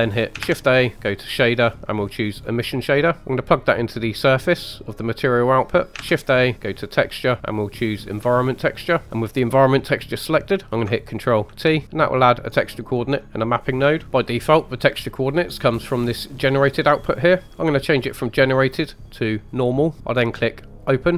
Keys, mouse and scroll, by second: 0.4 shift+a, 3.7-4.0 drag, 5.4 click, 5.9 ctrl+shift+z, 5.9 middle click, 6.0 shift+a, 9.0 click, 11.5 ctrl+t, 11.8 middle click, 13.2 middle click, 14.0 middle click, 14.0 scroll up 2, 18.4-19.5 drag, 20.0 middle click, 20.8 click.